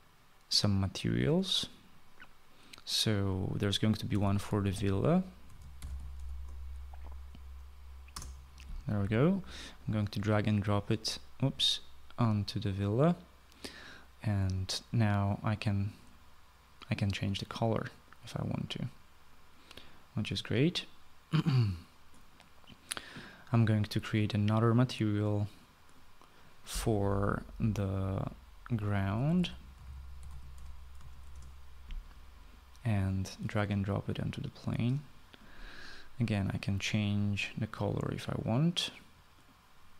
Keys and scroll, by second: 3.8-6.6 typing, 8.1 Return, 28.5-31.1 typing, 31.3 Return.